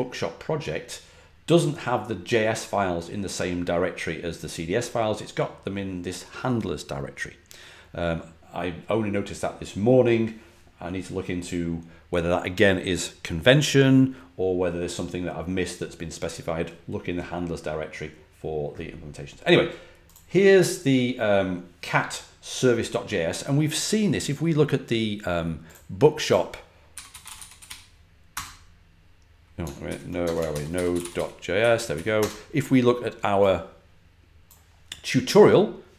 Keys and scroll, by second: 26.6-28.2 typing, 29.8 super+;, 30.1-32.6 typing.